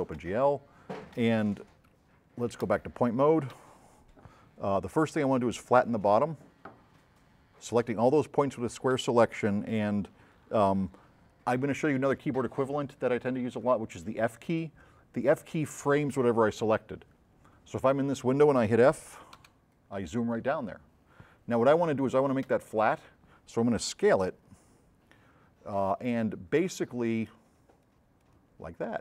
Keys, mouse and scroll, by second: 6.4-7.5 drag, 19.4 f, 21.2 middle click, 24.3 x, 27.4-29.0 drag.